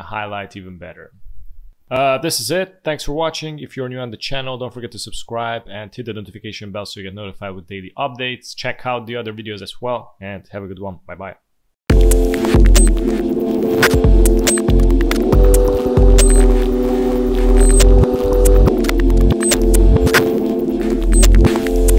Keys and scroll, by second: 0.3 alt+space, 1.0 space, 11.8 F1.